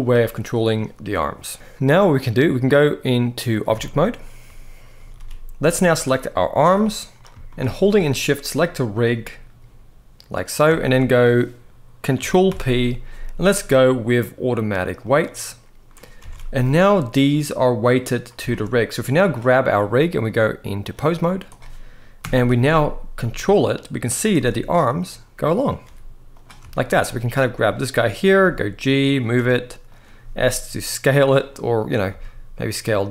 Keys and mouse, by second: 2.6-3.3 drag, 3.6-3.9 shift+middle drag, 4.7 ctrl+s, 4.9 ctrl+s, 5.6 click, 6.3 g, 6.8 right drag, 7.2 shift+middle drag, 8.3 shift+click, 10.5 shift+middle drag, 12.2 ctrl+p, 16.0 alt+a, 17.0 click, 18.2 shift+middle drag, 18.9 click, 20.1-20.6 drag, 21.9 KP_1, 22.9 g, 24.0 r, 25.6 g, 26.4 shift+middle click, 27.4 click, 28.1 g, 28.8 click, 29.1 r, 29.6 click, 29.9 s, 30.9 right click, 31.8 s, 32.5-33.1 right drag.